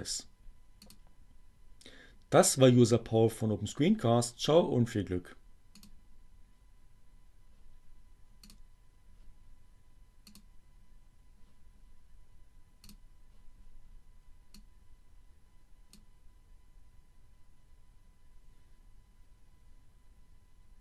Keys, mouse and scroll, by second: 0.6 click, 5.0-6.1 drag, 8.3 click, 10.4 click, 12.6 click, 14.5-15.8 drag.